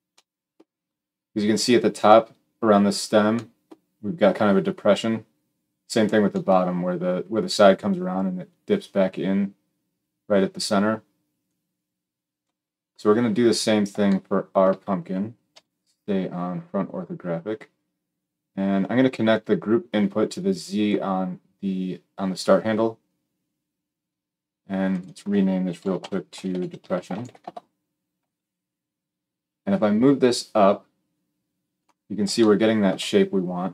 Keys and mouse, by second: 15.4 KP_1, 19.2-33.7 drag, 26.9 s.